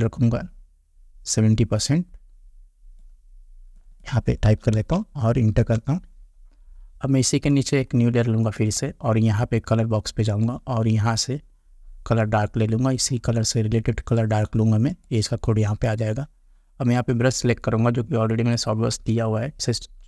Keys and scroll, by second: 4.5 7, 4.8 0, 5.6 Return, 19.1 [.